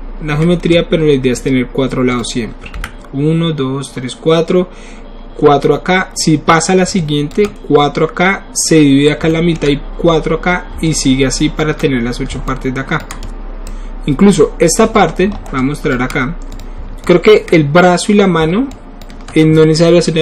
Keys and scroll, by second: 2.8 q.